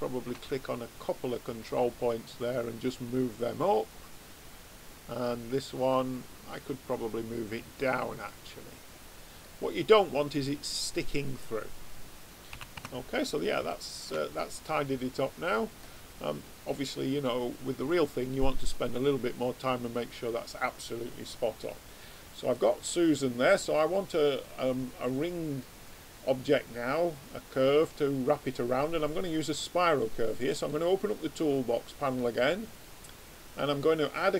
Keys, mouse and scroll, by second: 5.1-7.8 drag, 8.2-12.5 middle drag, 12.5 a, 12.8 Tab, 16.6 click, 20.0-30.4 middle drag, 30.4 click, 32.8 click.